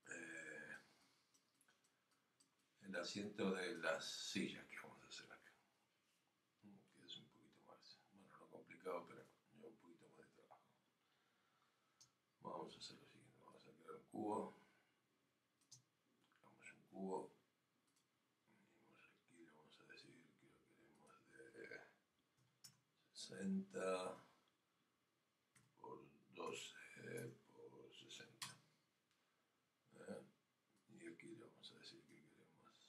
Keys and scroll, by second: 24.0 Tab, 27.2 Tab.